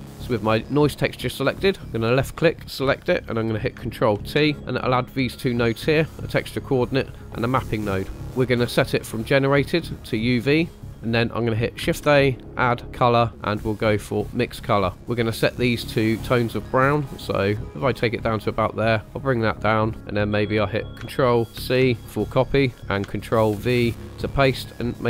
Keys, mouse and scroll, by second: 1.8 click, 4.1 ctrl+t, 4.5 middle click, 7.3 middle click, 8.1 click, 9.8-10.8 drag, 10.9 middle click, 11.8 shift+a, 14.9 middle click, 14.9 scroll up 1, 16.1 click, 21.5 ctrl+c, 23.5 ctrl+v, 24.2 click.